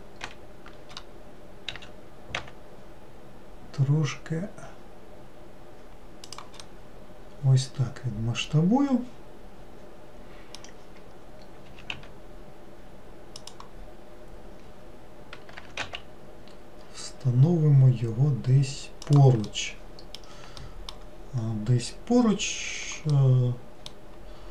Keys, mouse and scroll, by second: 0.3 ctrl+l, 1.8 s, 6.7-9.7 middle drag, 19.5-21.2 middle drag, 21.2 scroll down 2, 23.2-24.5 middle drag.